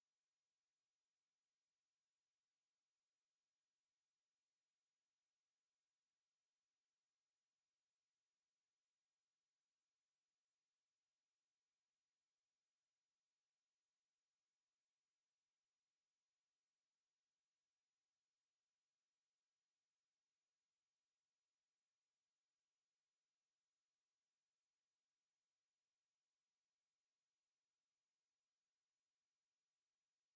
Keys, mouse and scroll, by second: 3.5 click, 8.0 ctrl+r, 10.1 s, 13.6 click, 14.2 shift+click, 15.1 s, 18.1 click, 19.4 shift+click, 19.9 s, 22.5 KP_1, 23.8 KP_7, 24.3 KP_3, 24.5 KP_1, 26.5 KP_3, 27.4 click, 29.1 KP_1.